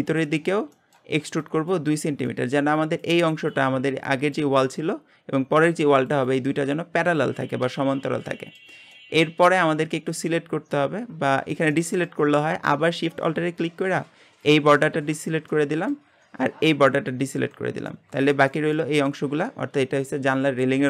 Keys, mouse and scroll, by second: 8.0 scroll down 2, 8.3-9.6 shift+middle drag, 9.6-9.9 scroll down 1, 9.9-11.3 shift+middle drag, 11.3-11.7 scroll up 1, 11.7-14.4 middle drag, 14.4 alt+shift+click, 15.2 scroll down 1, 15.5-16.9 shift+middle drag, 16.9 alt+shift+click, 17.6 scroll down 1, 17.9-19.0 shift+middle drag, 19.0-20.3 scroll up 1, 20.3 shift+middle click.